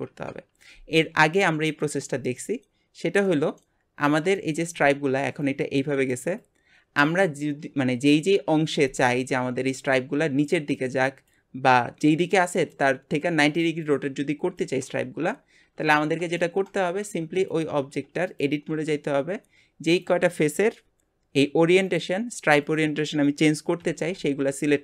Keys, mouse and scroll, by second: 2.3 click, 3.3 middle click, 4.4 shift+middle click, 16.4 shift+middle click, 17.0 Tab, 22.0 click.